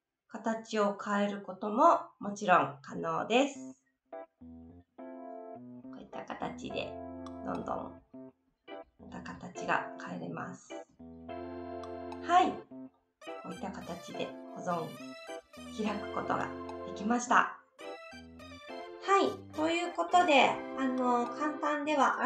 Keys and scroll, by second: 16.9 ctrl+z.